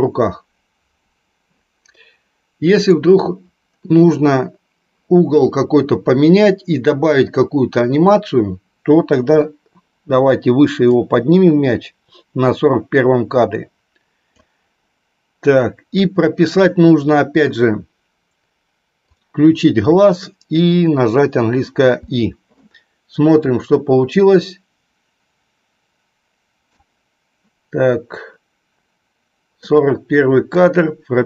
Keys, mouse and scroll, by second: 2.9 click, 10.8-14.3 drag, 19.0-27.2 drag, 30.3-31.2 drag.